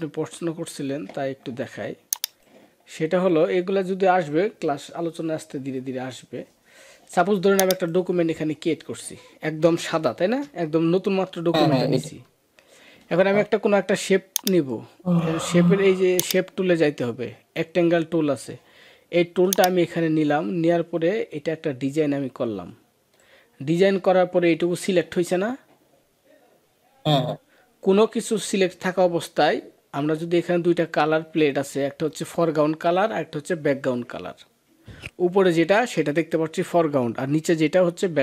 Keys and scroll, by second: 10.2 ctrl+-, 10.9 ctrl+=, 11.6 ctrl+=.